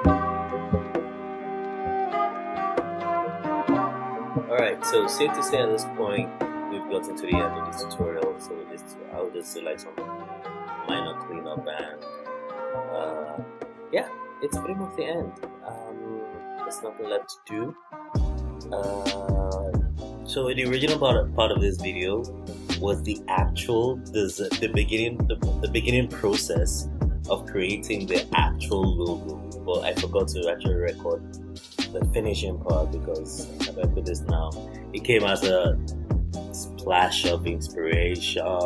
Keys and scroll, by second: 3.7 alt+Left, 6.5 super+z, 8.9 super+z, 11.4 super+[, 11.7 super+], 13.2 super+-, 13.3 super+-, 13.4 super+=, 13.5 super+=, 22.3 alt+Right, 32.4 alt+Right, 36.7 super+].